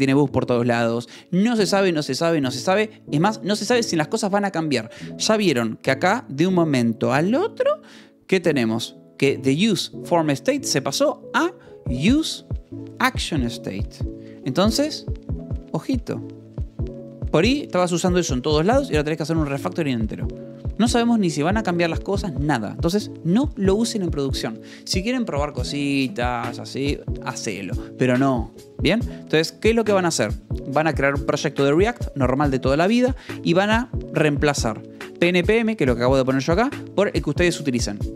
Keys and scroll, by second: 24.1 shift+j, 25.6 Escape, 29.1-30.4 typing, 33.9-36.6 typing.